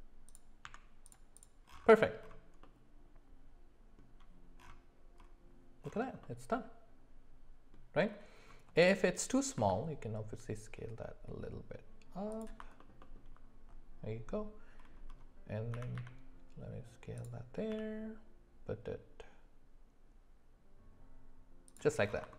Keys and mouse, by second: 0.6 Tab, 2.6-4.0 middle drag, 6.2-7.7 middle drag, 8.8 click, 9.6 s, 12.8 alt+middle click, 13.0 alt+middle click, 15.7 s, 17.7 g.